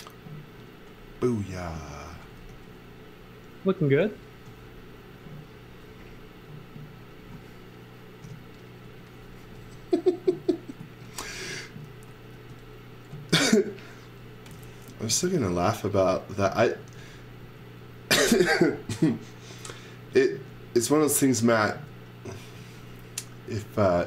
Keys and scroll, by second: 2.1 x, 2.4 v, 8.2 p, 8.8 x, 9.5 space, 10.8 z, 12.3 x, 15.0 z, 16.9 x, 18.4 x, 22.5 x.